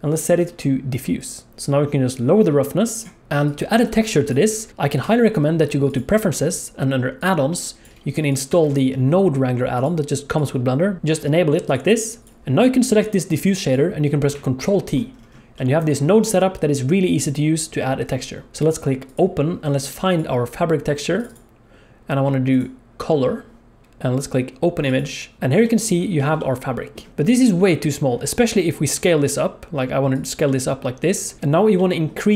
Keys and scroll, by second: 5.0 F4, 14.6 ctrl+t, 27.1 s, 28.4 s.